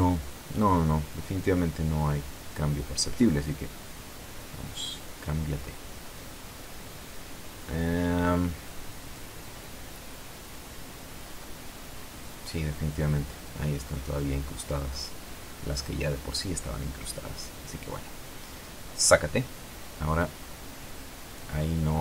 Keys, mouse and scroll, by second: 2.6 click, 4.1 r, 4.4 z, 5.7 click, 7.1 click, 9.8 F12, 19.6 Escape, 20.4 right click.